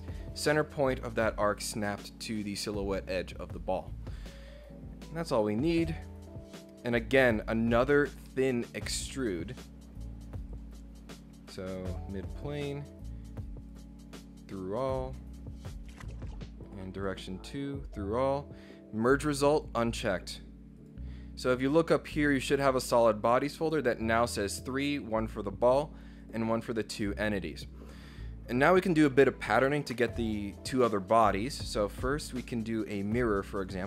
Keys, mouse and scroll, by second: 5.1 click, 6.9 click, 8.3 middle click, 10.5 click, 11.6 click, 13.7 click, 14.1 click, 16.7 click, 17.0 click, 19.5 click, 20.8 click, 23.4 click, 25.2 click, 26.2 click, 26.7 click, 31.4 click, 32.6 click, 33.6 click.